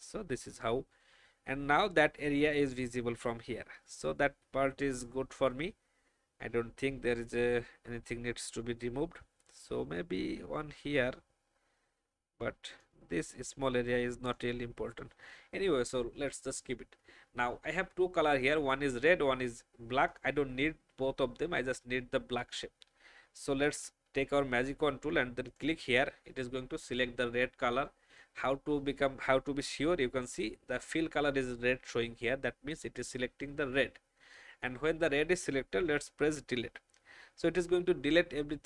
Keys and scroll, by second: 36.6 Delete.